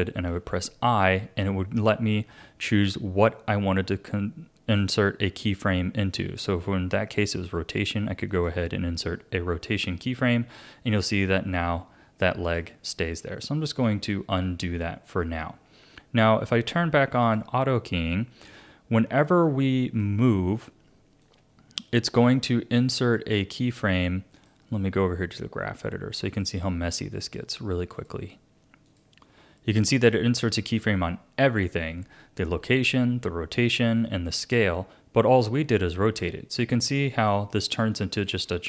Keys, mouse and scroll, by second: 0.3 i, 11.5-13.9 drag, 13.9 ctrl+z, 14.4 ctrl+z, 17.2 click, 18.5-21.3 drag, 24.3-28.0 drag, 28.8 click, 37.0 scroll up 1, 37.2-37.9 scroll down 9, 37.9 middle click, 38.4-38.6 scroll up 3.